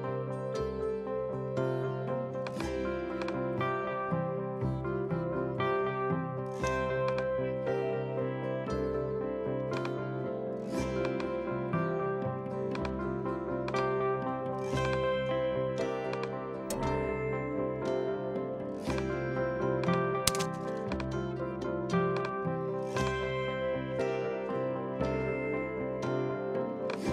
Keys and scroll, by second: 24.0 BackSpace, 25.1 Return.